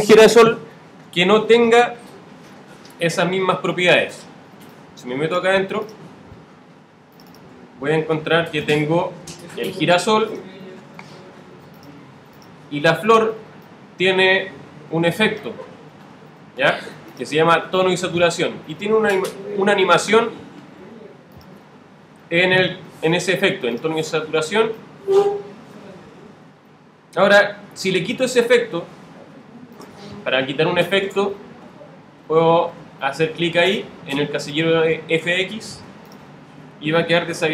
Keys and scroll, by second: 31.6 alt+super++.